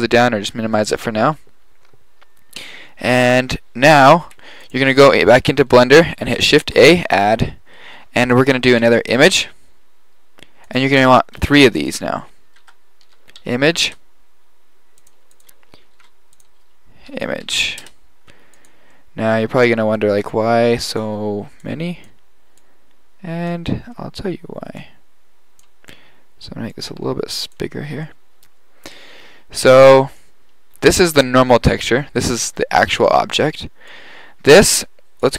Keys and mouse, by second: 3.6 middle click, 4.7 click, 6.7 shift+a, 11.4 shift+a, 15.4 click, 15.9 shift+a, 17.2-19.0 middle drag, 20.4-23.2 drag, 26.7 click, 28.3-29.5 middle drag, 31.3-33.4 drag, 33.9 drag.